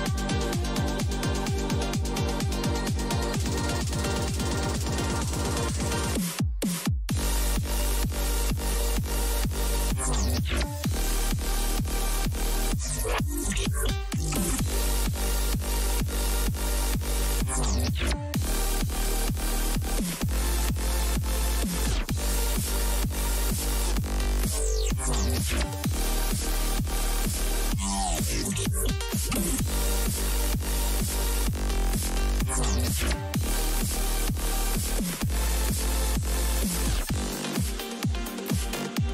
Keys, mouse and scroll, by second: 3.3-5.0 middle drag, 5.0 a, 5.6 a, 8.1 b, 11.3 g, 13.2 a, 15.2 ctrl+r, 17.4 a, 18.9 b, 20.5 g, 22.5 a, 25.9 ctrl+r, 27.9 a, 29.4 b, 31.2 g, 33.7 a, 35.0 b, 36.6 g, 38.6 a.